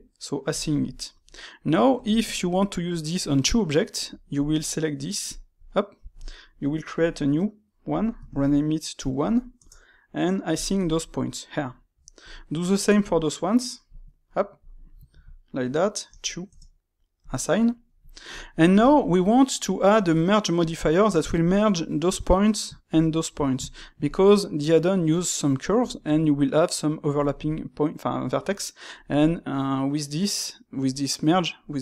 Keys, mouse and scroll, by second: 0.4 click, 1.0-4.3 shift+middle drag, 4.3 alt+click, 5.2 alt+click, 5.5-6.9 middle drag, 6.9 click, 7.8-12.2 drag, 13.8 click, 14.5 click, 14.6-18.0 drag, 18.0-21.4 shift+middle drag, 21.4 alt+click, 22.8 alt+shift+click, 23.6-31.5 ctrl+shift+middle drag.